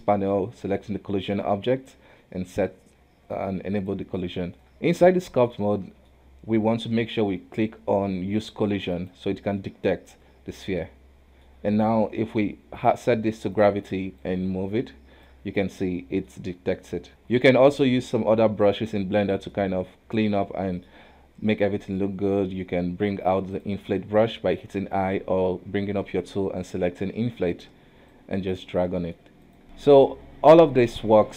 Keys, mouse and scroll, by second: 2.5 click, 5.2-8.8 middle drag, 8.9 click, 9.6-12.6 middle drag, 12.9-14.3 drag, 15.6 middle click, 16.4-16.7 scroll up 1, 16.7-18.7 middle drag, 19.2 shift+middle click, 19.8-20.2 scroll up 1, 20.2-23.2 middle drag, 23.2 f, 24.2-25.3 middle drag, 25.3 space, 26.0 space, 28.1 click, 28.9 middle click, 29.4 click, 29.6 space, 31.0 space.